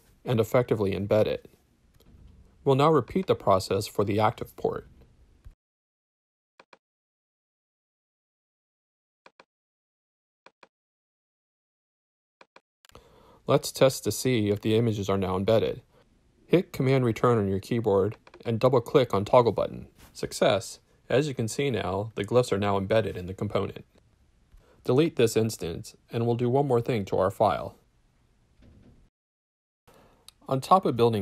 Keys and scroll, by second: 4.1 super+c, 7.0 shift+super+i, 11.4 super+v, 13.0 BackSpace, 14.1 BackSpace, 16.5 super+Return, 26.1 BackSpace.